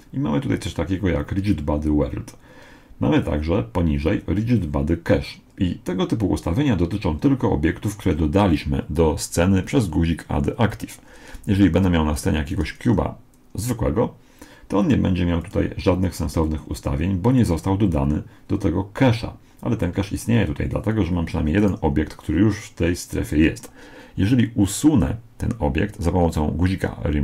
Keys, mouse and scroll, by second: 11.5 shift+a, 15.4-17.1 drag, 21.6 right click.